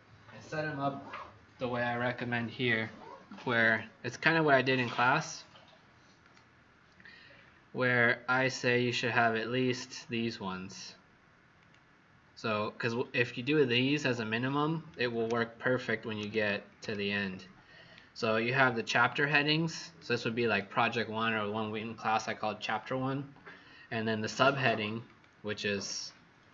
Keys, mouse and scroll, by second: 6.1 click, 7.2-7.8 scroll down 5, 9.5 click, 13.5-13.9 scroll up 2, 15.2 ctrl+=, 16.7 ctrl+=, 18.1 scroll down 1, 19.2 click, 25.4 click.